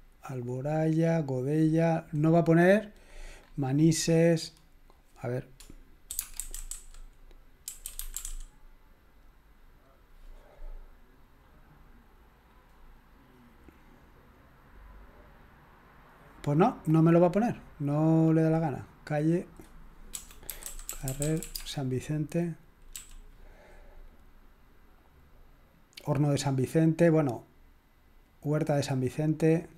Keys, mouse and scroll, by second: 3.1-4.1 scroll up 1, 5.9-8.7 typing, 16.0-17.5 drag, 17.7 click, 17.9 middle click, 18.1 click, 19.3 middle click, 19.5 click, 20.1-22.9 typing.